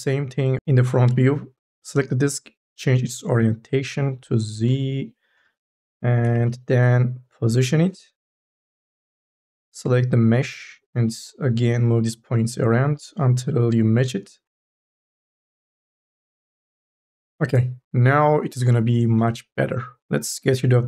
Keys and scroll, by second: 6.5 ctrl+z, 10.3 1, 14.7 ctrl+z, 17.3 ctrl+z.